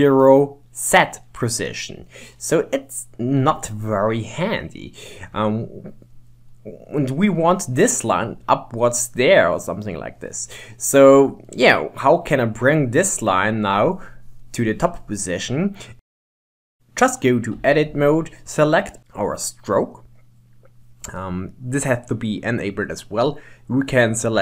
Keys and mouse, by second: 2.3 middle click, 4.3 middle click, 6.7 middle click, 9.7 middle click, 11.5-12.9 middle drag, 14.6 middle click, 17.5 Tab, 18.5 click.